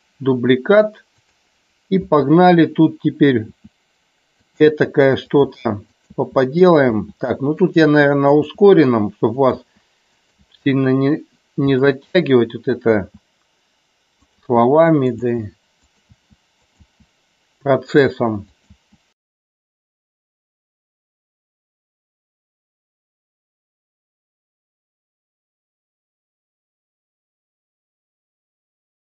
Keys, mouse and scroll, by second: 1.3 click, 3.7 e, 4.6 click, 4.8-10.6 typing, 5.4 click, 6.0 click, 7.6 click, 9.4 click, 10.3 click, 11.7 e, 11.8 click, 13.0 e, 14.3 click, 14.4 e, 15.1 click, 15.4 e, 15.9 click, 16.3 e, 16.7 click, 16.8 e, 18.7 click, 18.8-26.6 typing, 19.2 click, 20.1 click, 20.7 click, 22.0 click, 24.5 click, 25.9 click, 26.2 click, 26.5 click, 27.1 shift+middle click, 27.9-29.1 typing, 28.6 click.